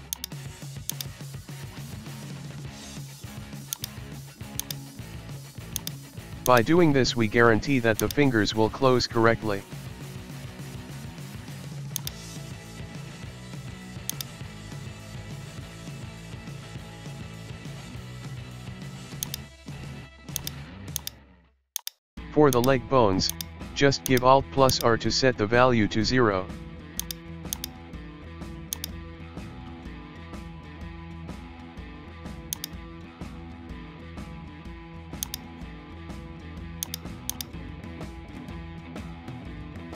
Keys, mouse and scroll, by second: 0.1-1.4 drag, 1.4 middle click, 2.0 KP_1, 2.3-3.7 shift+middle drag, 3.7 drag, 5.8-7.0 drag, 7.0 s, 8.2 middle click, 8.8 middle click, 10.9-11.6 shift+middle drag, 11.6 alt+s, 11.9 drag, 12.3-12.9 middle drag, 12.9 s, 14.4-15.9 middle drag, 15.9 alt+s, 16.1-16.5 scroll down 1, 16.5 shift+middle click, 16.7 KP_1, 17.0 scroll down 1, 17.2-18.1 shift+middle drag, 18.1 Tab, 18.8 shift+middle click, 18.9-19.2 scroll up 1, 19.2 click, 20.4 shift+click, 20.9 shift+click, 21.4 shift+middle click, 21.7 shift+click, 22.5 shift+click, 23.0 shift+middle click, 23.3 shift+click, 23.8 shift+middle click, 24.0 shift+click, 24.7 shift+click, 25.2-26.3 middle drag, 26.3-27.0 scroll up 2, 26.5 shift+middle click, 27.0 shift+click, 27.5 shift+click, 27.9 shift+middle click, 28.7 shift+click, 29.6-29.9 scroll down 1, 29.9-31.2 shift+middle drag, 31.2 scroll up 1, 31.4-32.6 shift+middle drag, 32.6 shift+right click, 33.1 KP_1, 33.3-34.8 scroll down 1, 35.2 click, 35.8-36.9 scroll up 1, 36.9 shift+right click, 37.3 shift+right click, 39.3 alt+r.